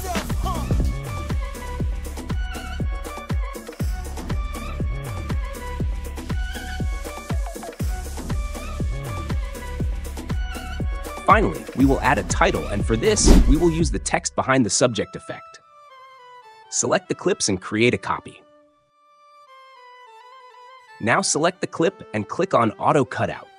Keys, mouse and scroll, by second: 3.3 click, 3.8 click, 4.3 click, 4.4 space, 5.5 space, 8.4 click, 9.9 click, 11.7 click, 14.8 click, 16.9 ctrl+b, 19.3 ctrl+click, 19.5 ctrl+c, 19.7 ctrl+v, 20.3 click, 21.0 click, 22.1 click.